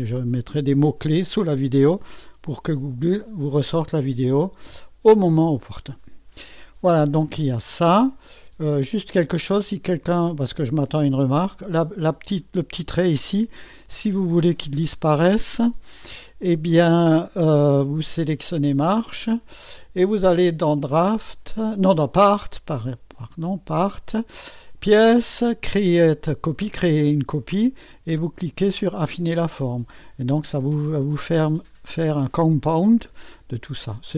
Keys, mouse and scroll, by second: 4.5-5.3 scroll up 2, 5.3-7.7 scroll down 2, 7.7-9.2 drag, 9.2-10.0 scroll up 2, 9.3 click, 10.0 scroll down 1, 10.1 middle click, 10.7-14.2 right drag, 15.0-18.2 middle drag, 18.2 click, 20.2 click, 20.9 click, 24.5 click, 29.1 click, 31.4-33.7 middle drag.